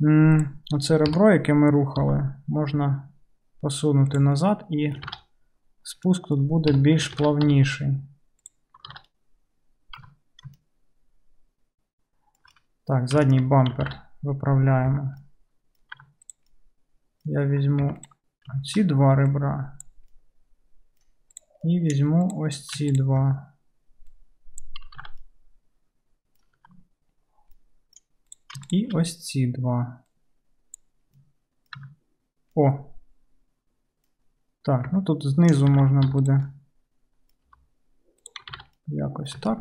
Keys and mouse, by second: 0.5-13.4 middle drag, 1.1 KP_3, 2.1 g, 5.2 alt+z, 6.8 KP_3, 7.5 g, 9.0 alt+z, 10.1 Tab, 14.0 alt+z, 15.0 Tab, 15.2-16.2 middle drag, 16.0 2, 16.2 click, 16.4-18.0 middle drag, 18.0 ctrl+click, 18.1-19.3 ctrl+middle drag, 19.3-21.5 drag, 21.5 middle click, 22.2 click, 22.4-24.2 middle drag, 24.2-28.5 drag, 25.1 alt+z, 26.7 2, 28.5 shift+middle click, 28.8 shift+click, 28.8-30.2 shift+middle drag, 30.2-36.4 drag, 31.8 Tab, 35.8 alt+z, 36.1 1, 36.4-39.6 middle drag, 37.6 g.